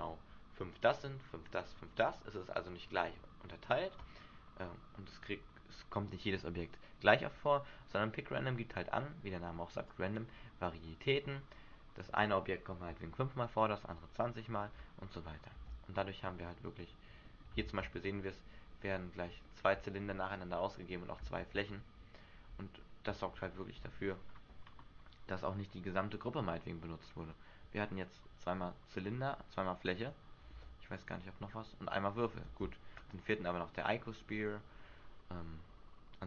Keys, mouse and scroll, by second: 10.1 click, 11.3 click, 15.7 alt+a, 16.1 scroll down 2, 17.3 scroll down 2, 17.4 shift+middle click, 17.9 alt+a, 18.3 middle click, 19.5 shift+middle click, 20.0 middle click, 20.9-21.2 scroll down 3, 21.5 alt+a, 24.0 Escape, 24.2-25.5 scroll up 4, 27.2-27.7 scroll down 3, 27.9-28.9 scroll down 2, 28.9-29.5 scroll up 1, 30.0 click, 30.7 alt+a, 32.6 alt+a.